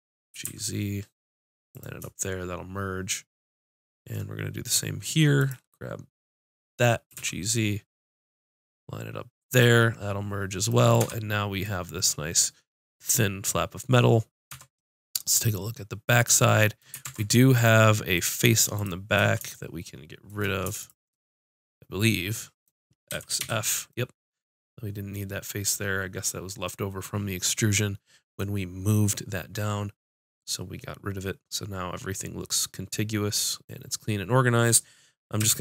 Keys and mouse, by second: 0.3 g, 1.8-3.5 drag, 5.3-7.0 drag, 7.0 g, 9.5 click, 11.0 Tab, 13.4 click, 17.0 ctrl+Tab, 18.1 click, 19.7-22.1 drag, 23.1 x, 33.9-35.4 middle drag, 35.4 a.